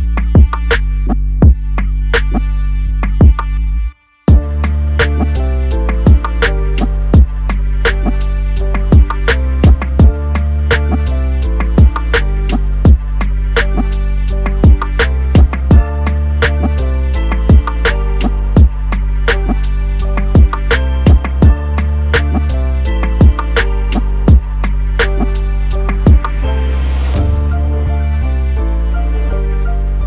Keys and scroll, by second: 0.3 ctrl+j.